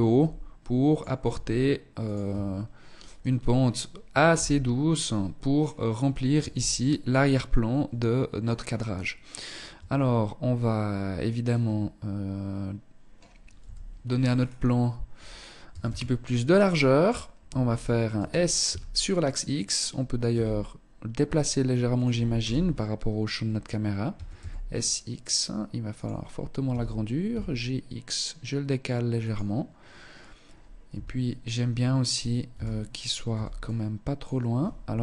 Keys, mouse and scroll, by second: 0.4 e, 1.4 Tab, 3.4 KP_0, 4.6 scroll down 2, 5.4 z, 8.8 Tab, 12.7 KP_7, 13.4-14.8 scroll down 5, 14.8 a, 15.0 a, 17.2 s, 19.4 g, 21.1 click, 21.4 KP_0, 23.2 s, 25.8 g, 30.0 KP_3, 31.2 scroll up 1, 31.6 a, 32.4 b, 34.4 z.